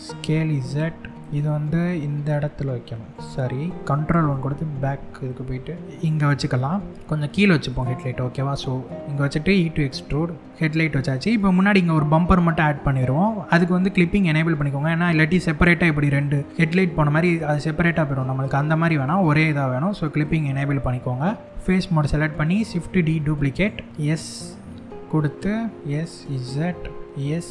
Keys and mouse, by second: 1.1 g, 3.8 ctrl+KP_1, 4.9 g, 7.3 click, 7.6 middle click, 9.2 e, 10.5 middle click, 12.8 middle click, 19.8 click, 22.3 shift+d, 23.1 right click, 23.9 s, 25.6 click, 25.8 s, 25.9 z, 27.0 s, 27.0 x.